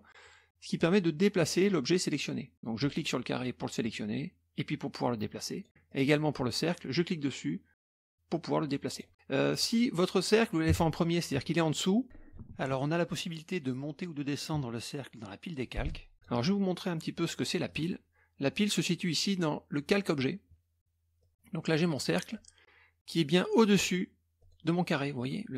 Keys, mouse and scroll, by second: 0.8-2.0 drag, 2.8 click, 3.8-5.8 drag, 5.9 click, 6.9-9.1 drag, 9.5 click, 16.1 click, 17.7 click, 21.2-22.6 drag, 24.4 click.